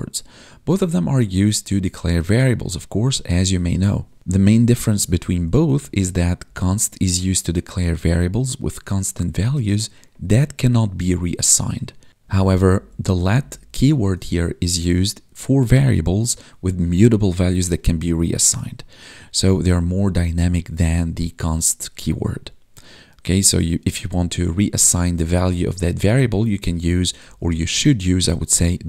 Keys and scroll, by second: 5.0 Up, 6.4 ctrl+shift+Right, 12.2 Down, 13.2 Left, 13.9 ctrl+shift+Left, 24.6 Right, 25.9 ctrl+shift+Right, 26.0 ctrl+shift+Left, 27.2 Right, 27.6 ctrl+shift+Left.